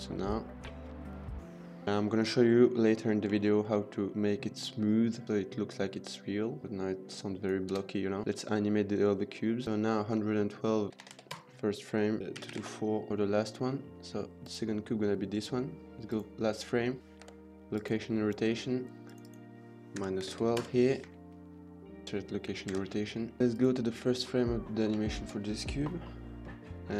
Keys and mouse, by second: 3.3 shift+middle click, 7.6 space, 8.2 ctrl+s, 8.2 middle click, 8.2 space, 9.4 click, 10.9 click, 11.3 KP_1, 12.2 click, 12.3 KP_2, 13.5 middle drag, 14.3 click, 15.9 click, 17.8 k, 19.0-20.6 drag, 21.0 g, 21.0 z, 22.0 k, 22.6 ctrl+s, 23.0 middle drag, 23.5 click, 24.1 middle click, 24.9 shift+middle drag.